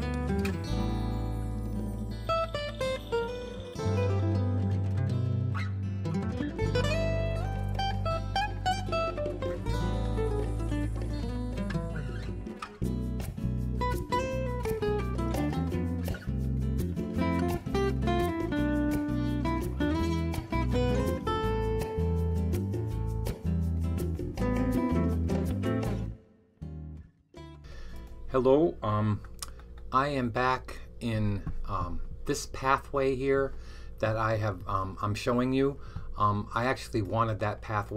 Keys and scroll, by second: 0.0-2.6 typing, 10.7 super+z, 11.3 super+z, 20.1 super+s, 20.8 r, 24.2 b.